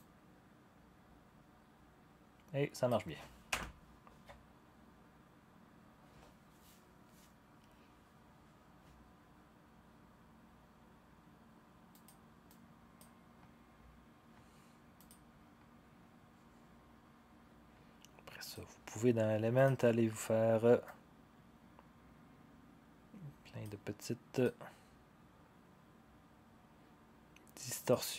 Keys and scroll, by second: 3.5 0.